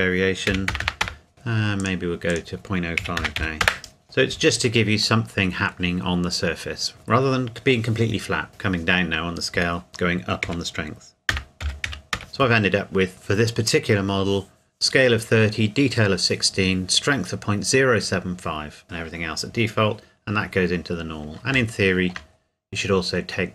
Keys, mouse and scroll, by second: 0.5 KP_1, 0.7 KP_0, 1.0 KP_Enter, 1.8 click, 3.0 KP_Decimal, 3.2 KP_0, 3.3 KP_5, 3.6 KP_Enter, 5.2 middle click, 6.4-7.1 scroll down 1, 8.5 KP_Enter, 9.9 click, 10.4 KP_Decimal, 11.3 KP_0, 11.6 KP_7, 11.9 KP_5, 12.1 KP_Enter, 20.5-20.9 scroll down 1, 20.9 scroll up 1, 21.0 scroll down 1, 21.7 shift+middle click, 22.2 scroll down 1.